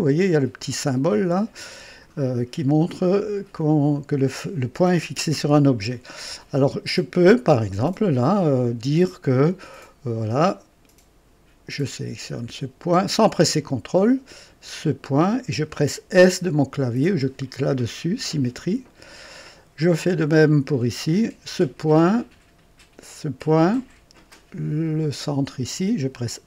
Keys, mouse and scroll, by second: 2.4 scroll down 2, 2.8 right click, 6.9 right click, 11.8 click, 13.3 click, 15.2 click, 18.6 s, 21.1 click, 23.1 click, 25.0 click.